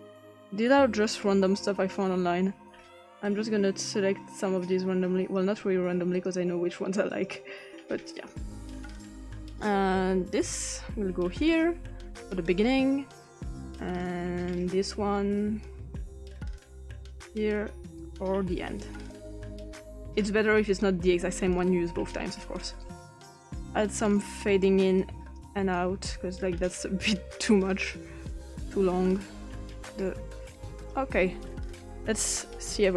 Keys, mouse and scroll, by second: 1.5 click, 3.8 click, 6.1 click, 7.1 click, 8.1 click, 9.5-11.7 drag, 14.6 click, 16.5 click, 18.0-20.6 drag, 22.8 click, 24.0 click, 25.0 click, 26.1-27.4 drag, 27.7 click, 30.0-30.9 drag, 32.1-32.4 drag.